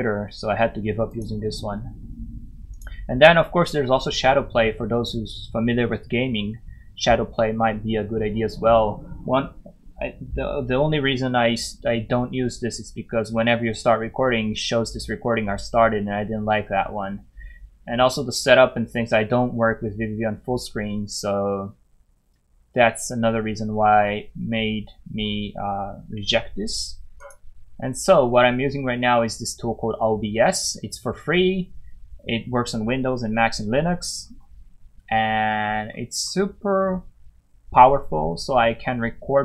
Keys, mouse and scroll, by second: 0.5 scroll up 1, 1.1 click, 27.2 click, 30.7 scroll down 1, 34.9 scroll down 1, 35.5 scroll down 1, 36.2 scroll up 1, 37.7 scroll up 1.